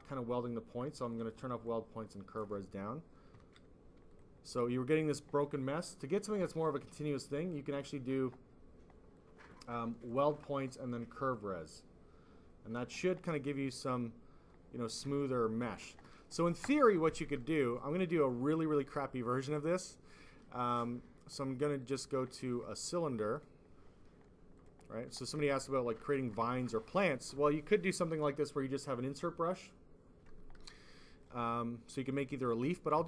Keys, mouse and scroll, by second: 1.0 click, 1.2 click, 1.6 click, 3.4 ctrl+z, 4.0 click, 5.9 click, 6.0 click, 6.8 click, 9.1 click, 10.0 click, 10.1 click, 10.8 click, 13.8 click, 15.1 f, 15.6 f, 21.7 click, 23.0 click, 23.2 click, 24.5 click, 25.4 alt+f, 26.0 alt+click, 26.4 shift+click, 30.6 click, 32.0 click.